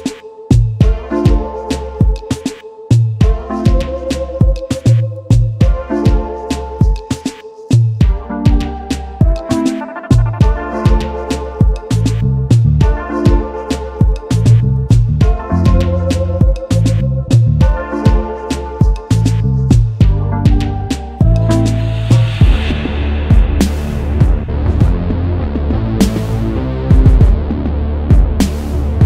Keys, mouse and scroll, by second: 0.4 space, 1.3 alt+scroll up 1, 6.2-6.9 alt+scroll down 1, 11.6 ctrl+F11, 11.8-14.0 scroll down 1, 14.0 double click, 17.1-19.8 typing, 21.4 typing, 25.8 double click, 26.2 space.